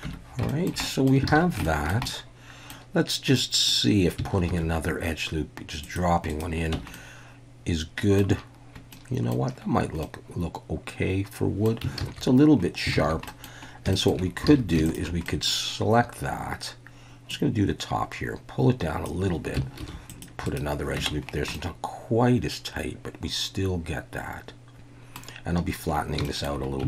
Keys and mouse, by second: 0.0 Tab, 0.5 shift+click, 0.8 click, 1.3 alt+a, 1.6 shift+drag, 2.0-2.7 drag, 2.7 middle click, 3.3 middle click, 4.5 ctrl+r, 6.3 right click, 6.7 Tab, 6.9-8.2 middle drag, 8.9-9.3 middle drag, 10.0-11.7 middle drag, 12.0 ctrl+z, 13.0 ctrl+z, 13.3 click, 13.9 shift+click, 14.5 alt+a, 15.3 middle click, 17.4-19.0 drag, 19.8 ctrl+r, 20.5 right click, 21.0 Tab, 21.6-25.2 middle drag, 26.2 shift+middle drag.